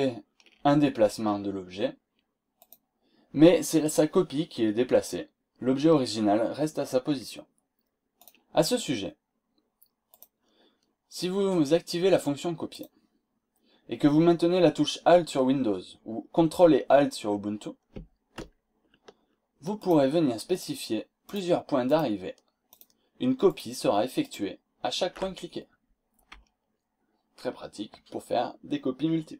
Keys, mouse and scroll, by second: 2.5 click, 8.1 click, 10.1 click, 12.7 click, 19.8 click, 20.0 middle click, 20.5 click, 21.2 ctrl+alt+click, 21.8 click, 22.7 click, 23.5 click, 24.2 ctrl+alt+click.